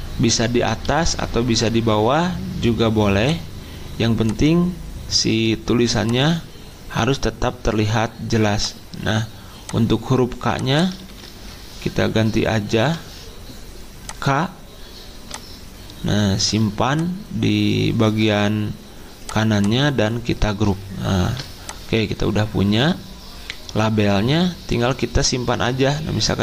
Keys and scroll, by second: 0.9 ctrl+z, 11.0 ctrl+a, 12.8 k, 21.2 ctrl+g.